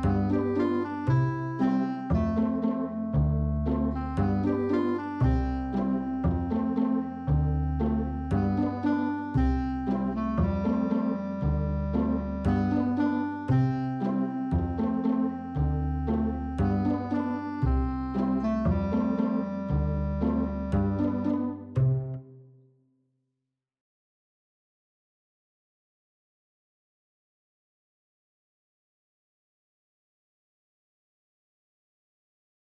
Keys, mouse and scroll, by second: 1.1 click, 2.5 middle click, 4.0-5.0 drag, 5.9 click, 6.4 click, 7.0 shift+a, 9.8 q, 11.6 middle click, 12.8 click, 14.1-15.9 drag, 16.5 click, 18.1-18.9 drag, 20.3 shift+middle click, 20.6 middle drag, 21.0 middle click, 21.4 shift+middle click, 22.6 middle click, 23.4-32.7 drag.